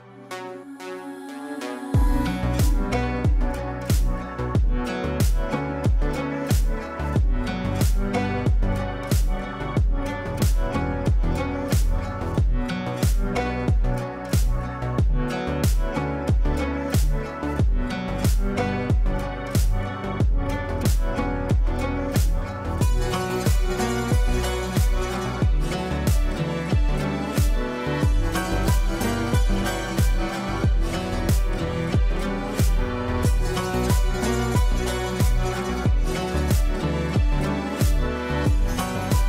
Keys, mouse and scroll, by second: 0.8 Return, 3.7 ctrl+space, 5.7 alt+e, 6.4 m, 6.9 Return, 7.8 click, 8.0-11.8 drag, 16.8 F4, 17.7 click, 18.9 shift+click, 19.9 l, 20.7-23.9 drag, 22.4-23.7 ctrl+drag, 28.5 F2, 29.6-31.2 drag, 33.6 right click, 35.8 F8, 36.7 ctrl+a.